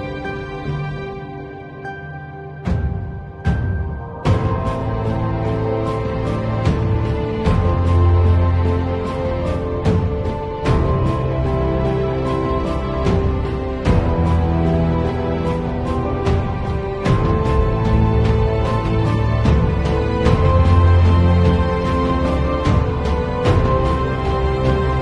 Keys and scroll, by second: 0.9 space, 16.0 b, 17.1 [, 18.7 [, 21.8 x, 22.6 0, 23.5 x.